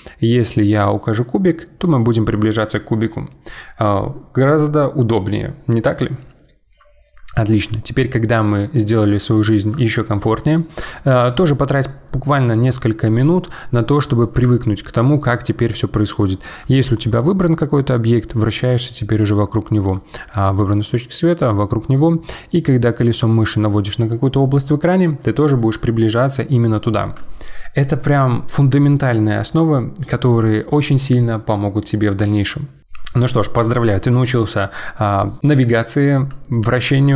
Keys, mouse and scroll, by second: 1.7-2.3 scroll up 5, 4.7-5.3 scroll up 1, 7.4-8.1 scroll down 3, 8.1 scroll down 1, 8.3-12.3 middle drag, 13.2-16.5 middle drag, 16.5 click, 16.9-19.8 middle drag, 19.8 click, 20.2-22.6 middle drag, 22.6-23.0 scroll up 7, 23.2-24.7 scroll down 4.